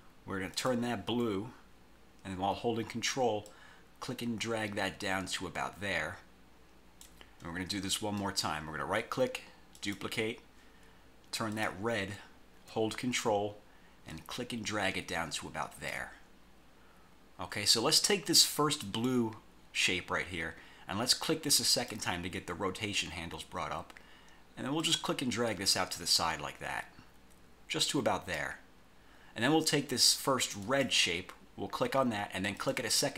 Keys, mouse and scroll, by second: 0.7 click, 3.6-7.3 ctrl+drag, 8.3 right click, 9.9 click, 11.7 click, 14.2-16.2 ctrl+drag, 18.9 click, 21.8 click, 24.9-28.7 drag, 30.7 click, 32.7 click.